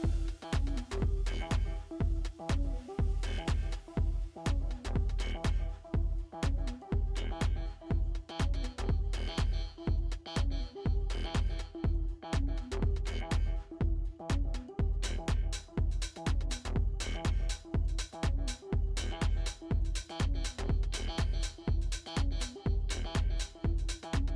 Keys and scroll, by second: 2.3 ctrl+g.